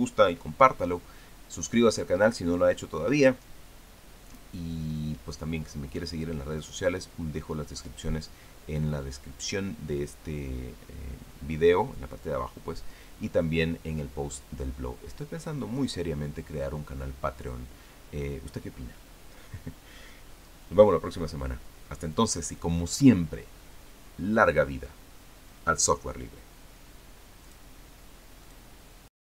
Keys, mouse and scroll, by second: 28.3 click, 29.3 click.